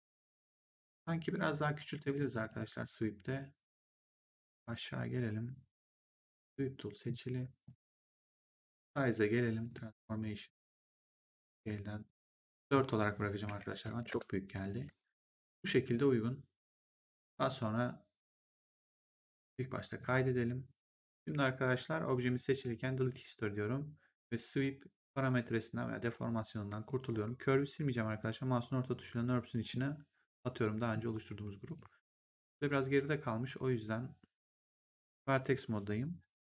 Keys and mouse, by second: 1.9 click, 5.9 click, 7.6 click, 9.6 click, 11.9 click, 13.3 0, 14.0 Return, 15.8 click, 17.5 right click, 19.9 click, 21.1 click, 21.7 click, 22.9 click, 26.8 click, 28.1 middle click, 31.5 click, 33.6 right click, 34.3 click.